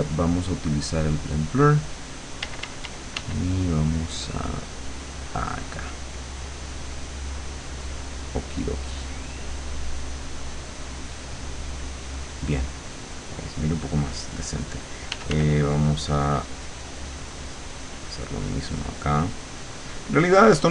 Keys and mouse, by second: 1.1 click, 2.5 d, 3.6-11.4 drag, 15.2 f, 15.6-18.4 drag, 18.6-20.7 drag.